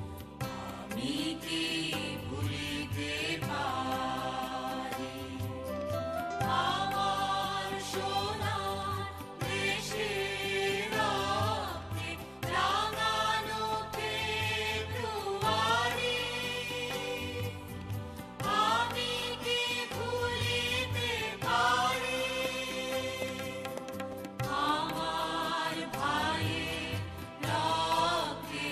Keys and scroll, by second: 0.0 Down, 13.9 ctrl+[, 18.6 Down, 19.2 Down, 22.8 ctrl+c, 23.2 ctrl+b.